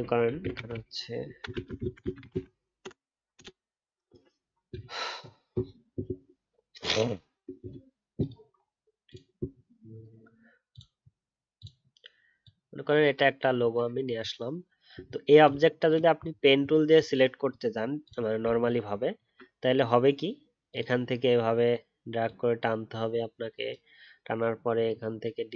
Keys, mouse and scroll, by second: 18.5 alt+scroll up 1.